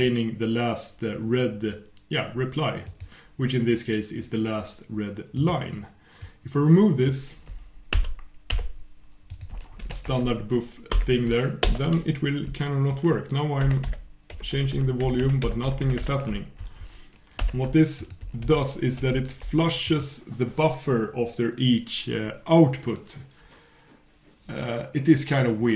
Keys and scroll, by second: 9.3 super+', 13.6 super+\, 13.8 super+\, 14.3 super+', 14.5 super+', 15.0 super+\, 15.4 super+'.